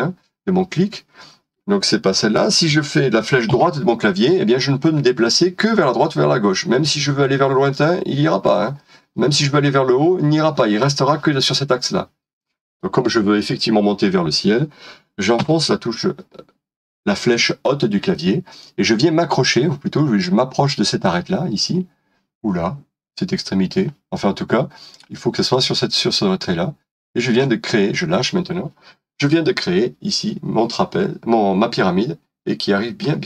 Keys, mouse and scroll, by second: 3.5 Right, 15.4 Up, 29.2 middle click.